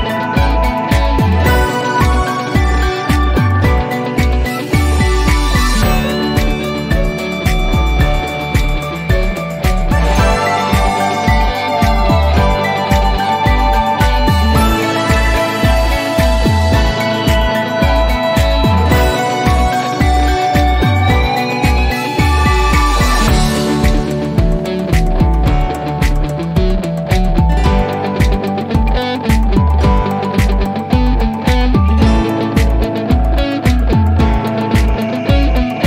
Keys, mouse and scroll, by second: 4.5 click, 6.3-7.3 drag.